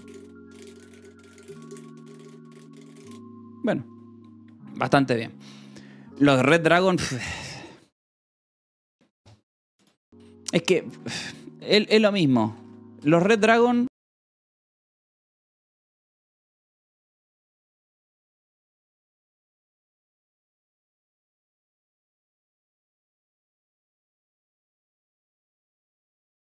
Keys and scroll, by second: 2.3 space, 3.1 i, 5.3 r, 5.7 u, 10.1 Delete, 11.2-12.2 typing.